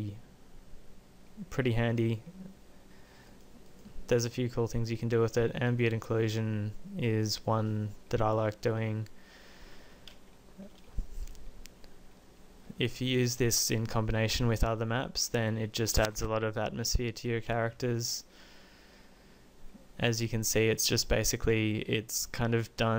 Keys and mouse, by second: 3.4-6.3 drag.